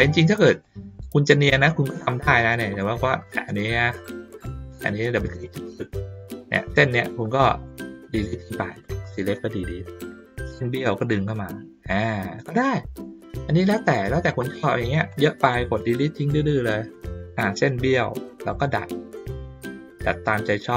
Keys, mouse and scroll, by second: 0.8 middle click, 1.6 ctrl+middle click, 2.5 ctrl+middle click, 2.8 ctrl+middle click, 3.2 click, 3.9 ctrl+middle click, 5.2 click, 5.4 click, 6.5 ctrl+middle click, 7.2 click, 11.1-12.4 drag, 13.0 middle click, 14.0 middle click, 15.1 click, 18.5 click, 20.4-20.7 drag.